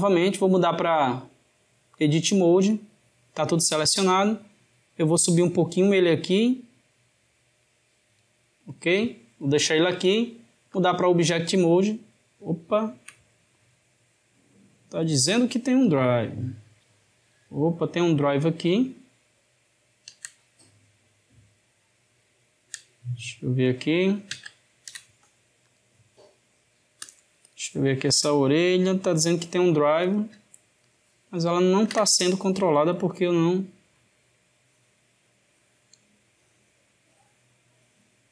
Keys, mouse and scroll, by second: 4.1 click, 9.9-12.5 drag, 12.5-15.8 shift+middle drag, 15.8 click, 17.3-20.1 middle drag, 20.1 ctrl+z, 25.6-27.1 drag, 27.5 click, 28.1-30.0 middle drag, 30.0 click, 31.7 ctrl+Tab, 33.4-33.7 drag.